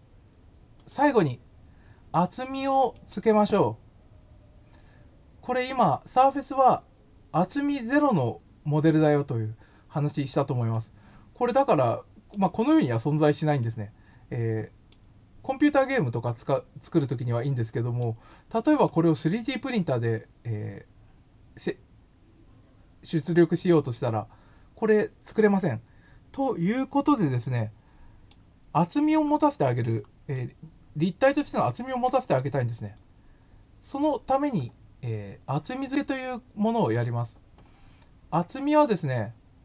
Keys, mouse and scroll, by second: 0.7 click, 2.9-5.5 middle drag, 10.7-12.0 middle drag, 12.7 middle click, 13.5-14.8 middle drag, 15.7 middle click, 17.8 middle click, 18.8-22.5 middle drag, 27.6 middle click, 28.7-29.8 scroll down 4, 30.2 middle click, 30.3 scroll down 1, 32.3 scroll up 1, 32.6 middle click, 32.7-34.0 middle drag.